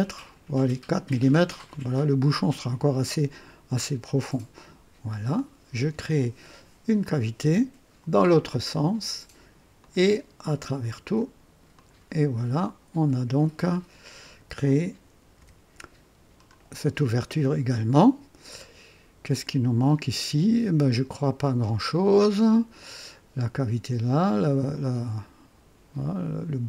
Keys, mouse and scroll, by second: 4.6 click, 7.0 click, 8.7 click, 9.8 click, 10.6 click, 11.7 click, 12.6-13.3 drag, 14.2 click, 15.4 &, 16.2-16.5 scroll down 1, 16.8-26.6 drag, 20.8 typing, 22.9 typing.